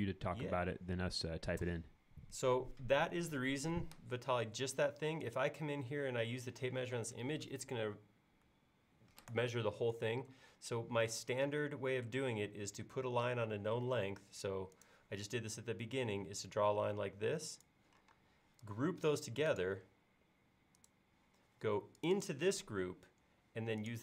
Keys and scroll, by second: 10.3 l, 18.1 space.